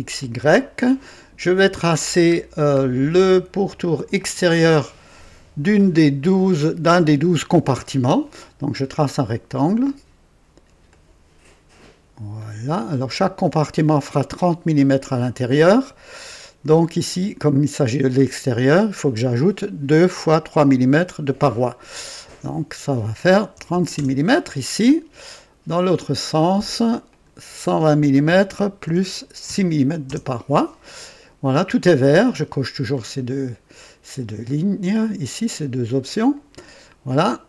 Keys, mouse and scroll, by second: 0.2 click, 1.6-2.3 right drag, 2.4-2.8 scroll down 2, 2.9 right click, 8.7 click, 10.8 click, 12.3 click, 12.9 right click, 14.7 right click, 16.7 click, 22.4 click, 23.6 KP_3, 23.7 KP_6, 23.9 Return, 25.8 click, 27.1 click, 28.3 KP_1, 28.8 KP_2, 29.4 KP_6, 30.0 Return, 32.9-33.7 drag, 34.5-36.1 drag, 36.1 typing, 36.3 click, 37.2-37.4 right drag.